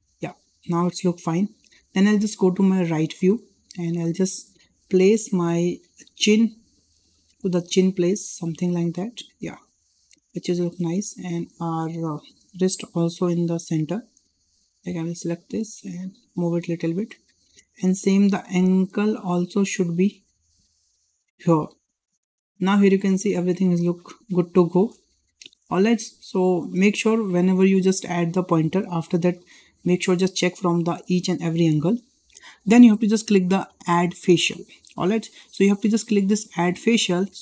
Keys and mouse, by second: 5.8 click, 6.6-8.7 drag, 9.5 shift+middle click, 10.3 shift+middle drag, 11.2 click, 12.5 click, 14.5 click, 15.5 click, 15.6 click, 17.0 shift+middle click, 17.5 shift+middle drag, 19.6 click, 20.7 click, 20.7 click, 22.0 `, 24.2 shift+middle click, 24.9 shift+middle drag, 25.7 shift+middle click, 26.1 shift+middle click, 36.6 click.